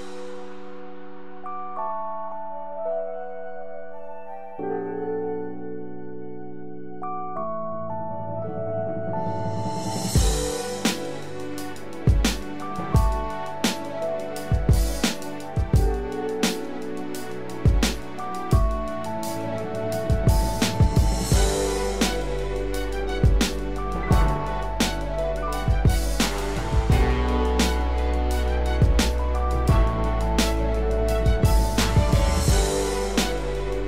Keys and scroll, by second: 16.5 ctrl+=, 20.4 ctrl+-, 22.3 ctrl+=, 29.2 ctrl+0, 30.7 ctrl+=.